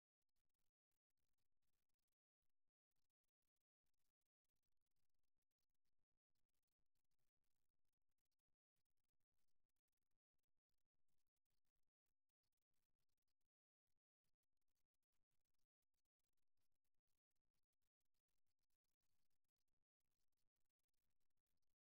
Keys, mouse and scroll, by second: 0.8 KP_3, 3.0 g, 11.1-12.9 middle drag.